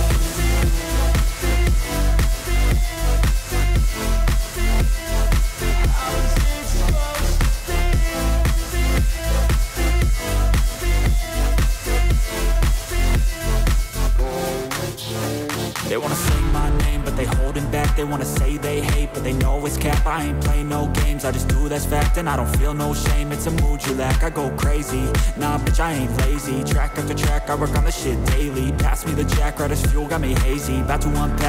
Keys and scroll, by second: 18.6 ctrl+j, 18.8 ctrl+t.